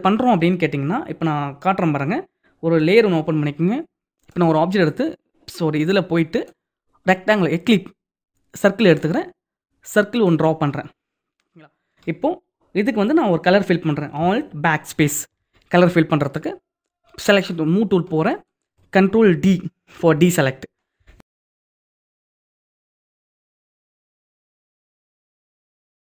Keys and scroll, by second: 14.6 alt+BackSpace, 19.5 ctrl+0.